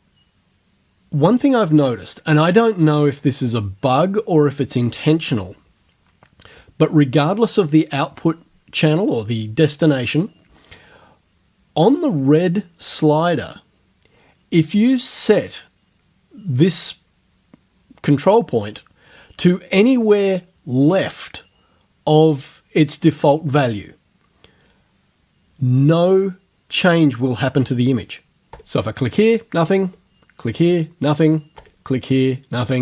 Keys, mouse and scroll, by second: 28.6 click, 29.9 click, 31.6 click.